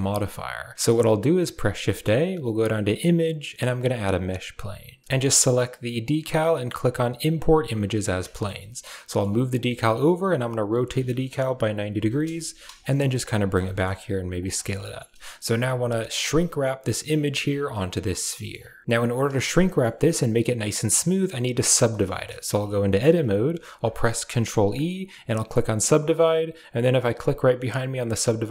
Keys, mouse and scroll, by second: 1.3 shift+a, 7.0 click, 7.8 middle drag, 8.2 shift+middle click, 13.5 middle drag, 14.4 shift+middle click, 14.6 middle drag, 17.5-18.0 middle drag, 18.2 shift+middle drag, 19.3 Tab, 19.4 middle click, 20.7 middle click, 21.3 middle click, 21.6 Tab, 21.9 shift+middle drag, 22.7 shift+middle click, 23.6 ctrl+e, 26.5 click, 27.8-28.5 drag.